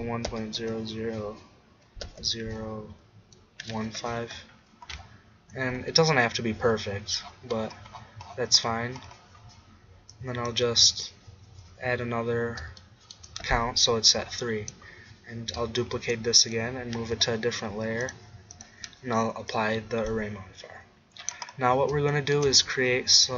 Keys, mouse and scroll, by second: 0.6 0, 5.0 middle click, 12.0 middle click, 16.0 middle click, 16.2 shift+d, 17.2 m.